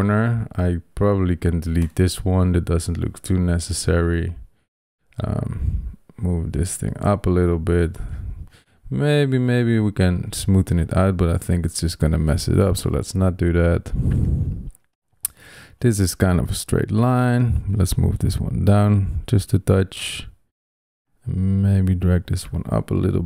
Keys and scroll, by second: 1.7 BackSpace, 12.3 super+z.